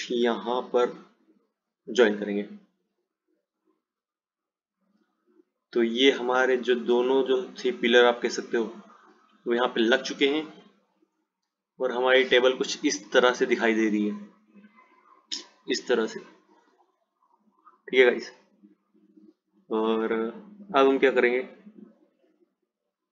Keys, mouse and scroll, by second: 4.0 click, 7.2 click, 9.5 click, 12.0 click.